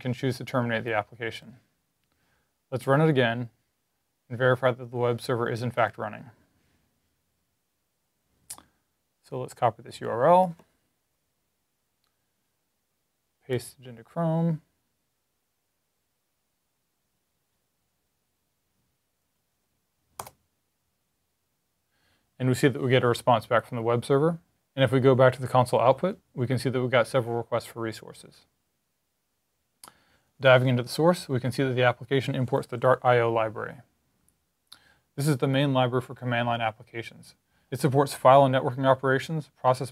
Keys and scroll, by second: 11.1 super+c, 13.2 super+t, 19.1 super+v.